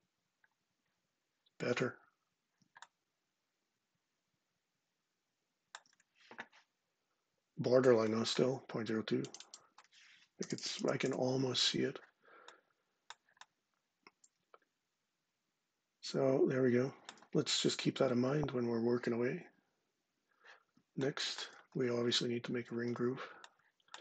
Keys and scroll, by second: 9.9-11.0 typing.